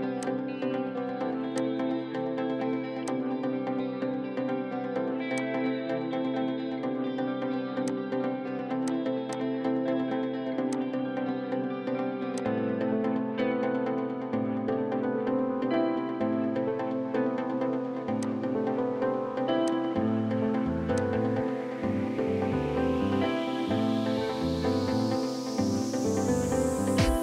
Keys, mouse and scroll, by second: 1.1-1.7 scroll up 1, 9.3 double click, 11.2-12.4 scroll down 1, 19.0-19.7 scroll up 1, 25.0 scroll up 1, 25.3 middle click, 27.1-27.2 scroll up 1.